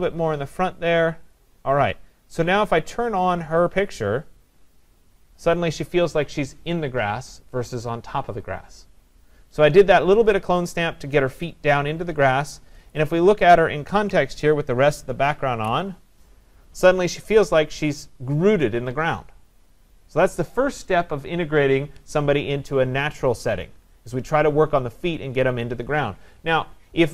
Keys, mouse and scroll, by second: 1.3 click, 3.4 click, 12.9 click, 15.5 ctrl+0.